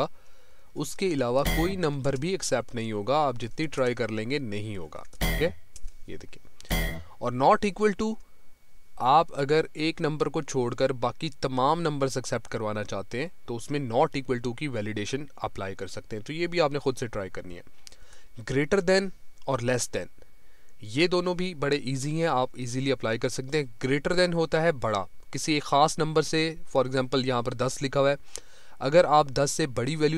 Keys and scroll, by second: 2.4 Down.